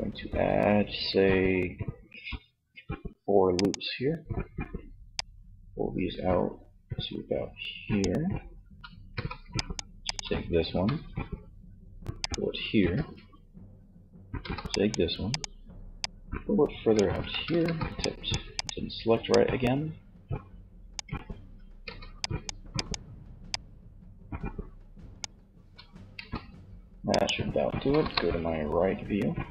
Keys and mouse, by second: 3.0-6.1 drag, 8.0 a, 8.1 c, 9.9 g, 12.2 a, 13.6 c, 16.6 ctrl+z, 16.8 c, 18.3-20.2 middle drag, 20.5 a, 21.2 c, 24.4 c, 24.7 a, 25.3 c, 27.0 KP_3.